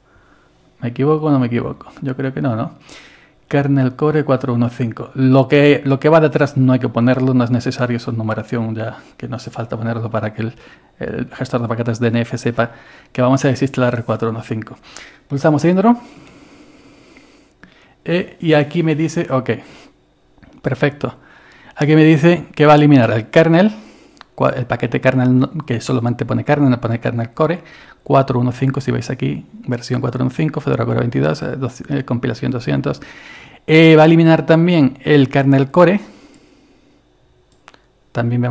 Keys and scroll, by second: 16.2 Return.